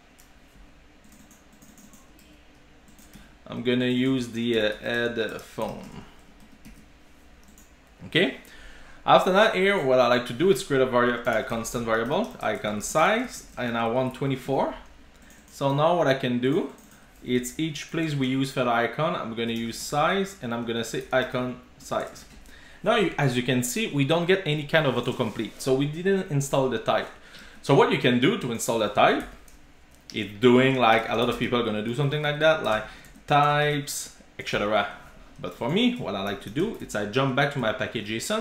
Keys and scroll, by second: 2.9 super+c, 3.2 super+v, 6.5 super+z, 6.7 super+s, 15.7 super+c, 17.3 ctrl+g, 22.0 Return, 22.1 super+s, 36.4 shift+super+o.